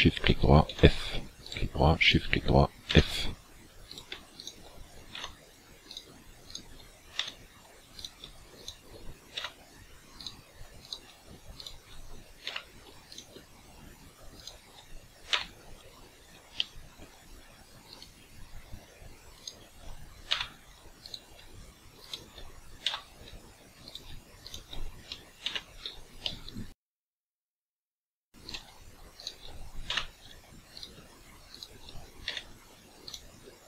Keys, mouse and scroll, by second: 0.7 f, 1.5 right click, 2.1 shift+right click, 2.9 f, 3.9 right click, 4.4 shift+right click, 5.2 f, 5.9 right click, 6.5 shift+right click, 7.2 f, 8.0 right click, 8.7 shift+right click, 9.5 f, 10.2 right click, 10.9 right click, 11.7 shift+right click, 12.5 f, 13.2 right click, 14.4 shift+right click, 15.3 f, 16.1 scroll up 2, 16.6 shift+middle click, 18.0 right click, 19.3 shift+right click, 20.3 f, 21.1 right click, 22.1 shift+right click, 22.9 f, 23.9 right click, 24.5 shift+right click, 25.4 f, 26.3 shift+middle click, 28.5 right click, 29.3 shift+right click, 29.9 f, 30.8 right click, 31.5 shift+right click, 32.3 f, 33.1 right click.